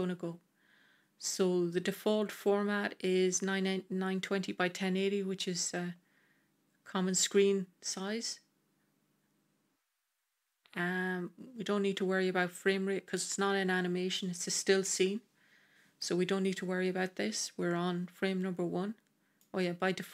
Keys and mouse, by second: 19.2 click.